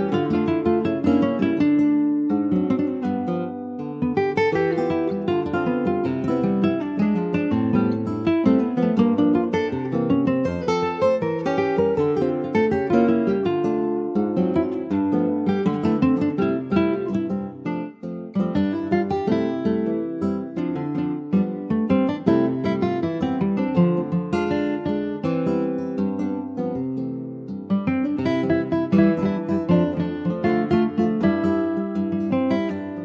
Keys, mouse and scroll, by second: 0.5 l, 5.0 scroll down 1, 5.7 alt+middle click, 6.7 scroll down 3, 6.9 shift+middle click, 7.6 e, 13.2 middle click, 13.7 ctrl+s, 13.8 click, 14.0 Tab, 14.3-14.8 scroll up 3, 14.8 shift+middle click, 15.0-16.1 scroll up 1, 16.1 ctrl+a, 17.1 shift+middle click, 17.6 Tab, 18.5 Tab, 18.9 scroll up 2, 19.4 shift+middle click, 19.8 Tab, 20.8 2, 21.2 click, 21.7 shift+middle click, 22.4 alt+shift+click, 24.1 alt+shift+click, 24.8 middle click, 25.7 ctrl+b, 31.1 click, 32.3-33.0 drag.